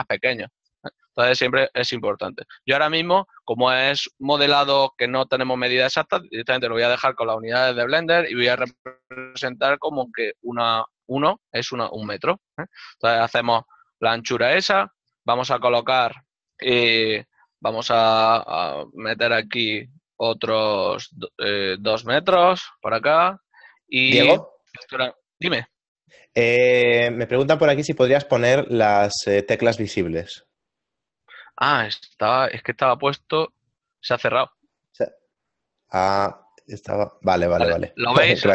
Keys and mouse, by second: 34.5 click.